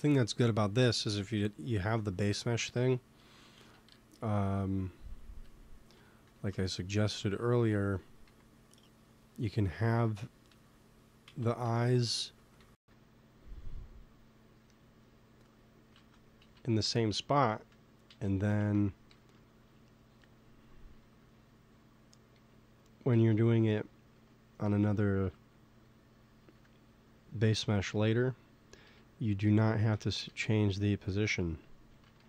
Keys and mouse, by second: 0.1 s, 0.7 Tab, 3.5 z, 5.0 z, 5.2 KP_3, 6.2 Tab, 6.5-8.1 middle drag, 8.1 s, 9.8 KP_1, 10.5 Tab, 11.2 z, 11.5 Tab, 12.1-13.4 middle drag, 12.4 g, 15.9 ctrl+z, 16.7 Tab, 18.0 z, 18.4 z, 18.6 Tab, 19.0 g, 20.2-23.7 drag, 20.9 g, 23.1 KP_3, 25.0 g, 26.4 Tab, 27.4 KP_1, 28.8-32.1 typing, 29.8 Tab, 31.5-32.2 drag.